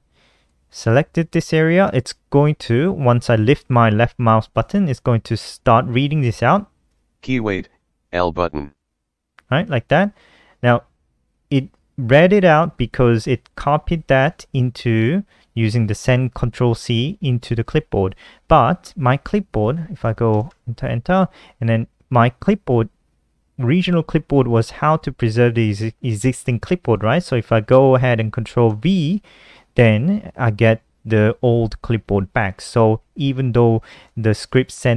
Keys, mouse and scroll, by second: 13.0 click, 19.9 Return, 20.0 Return, 26.4 click, 28.2 ctrl+v, 33.6 click.